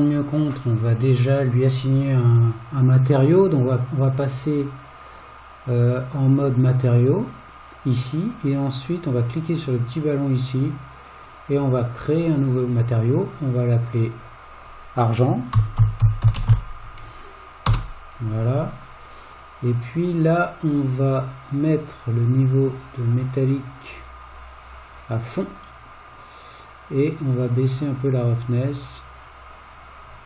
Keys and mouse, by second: 6.0 click, 9.7 click, 12.1 click, 14.2-18.6 drag, 21.9-25.4 drag, 27.0-30.2 drag.